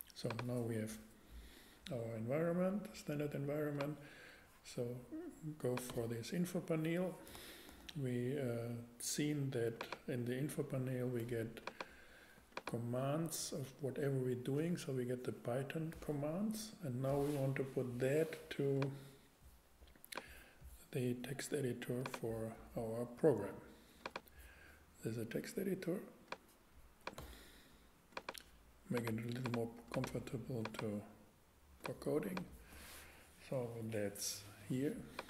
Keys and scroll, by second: 7.7 shift+a.